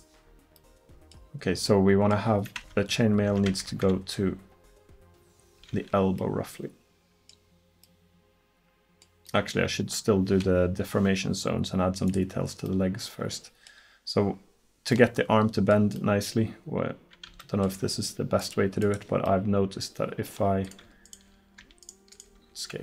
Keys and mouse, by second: 12.1-15.1 drag, 18.4-20.7 drag.